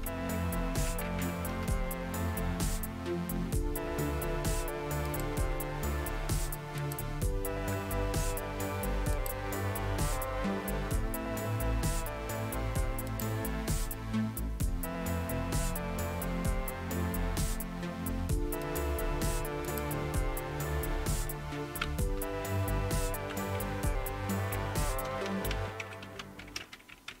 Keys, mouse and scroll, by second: 0.4-1.7 typing, 4.1 typing, 5.1 click, 6.8 click, 9.1 click, 13.1 click, 18.6 click, 19.0 click, 19.7 click, 22.1 Down, 22.6 Down, 22.7-23.3 Down, 24.5-27.2 typing.